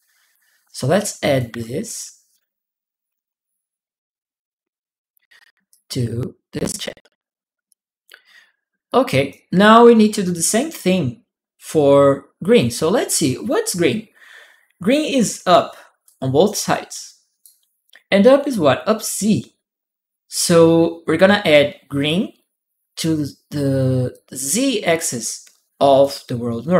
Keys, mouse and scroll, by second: 0.7 click, 1.3 a, 2.9 d, 3.6 Return, 5.5 click, 7.5-9.1 drag, 15.8-17.2 drag, 23.9-25.8 drag.